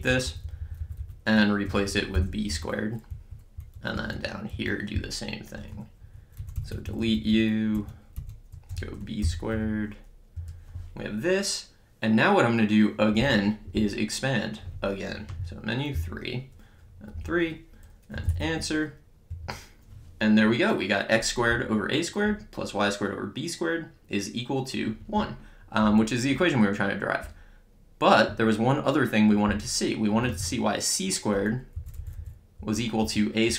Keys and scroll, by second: 1.4-3.0 typing, 3.1 Down, 3.9 Right, 8.7 b, 9.2 ^, 9.5 2, 10.3 Return, 13.8 Return, 15.1 Return, 15.3 Menu, 16.0 3, 17.9-18.8 typing, 19.3 Return, 25.7 Return, 29.9 Return, 31.8 Up.